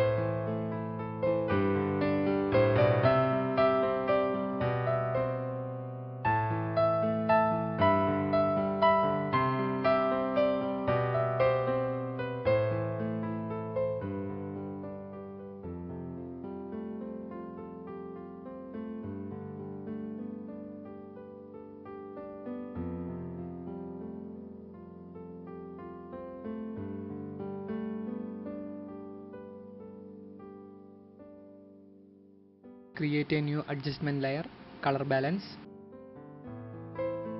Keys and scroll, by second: 0.8-4.6 typing, 7.5 ctrl+z, 11.6-13.7 typing, 16.2 space, 22.6 ctrl+alt+z, 24.1 ctrl+shift+z, 27.7 ctrl+alt+0, 28.4 ctrl+0.